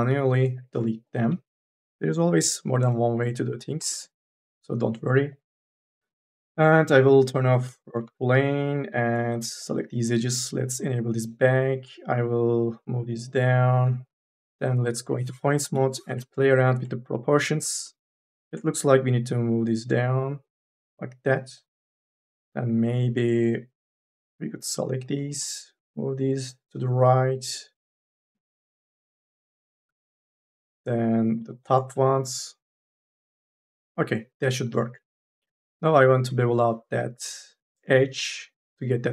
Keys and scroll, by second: 0.0 e, 1.6 Delete, 9.2 2, 13.9 KP_3, 14.9 1, 15.6 KP_0, 35.1 3, 35.7 2, 36.0 e.